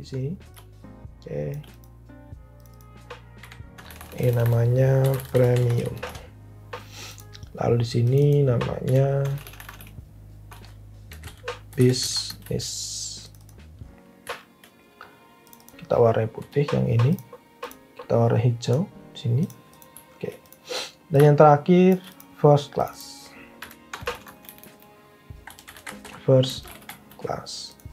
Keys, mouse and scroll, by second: 3.3 Tab, 3.7-6.2 typing, 9.0 Right, 9.1-12.6 typing, 16.4-18.1 typing, 23.7 Right, 23.8-27.4 typing.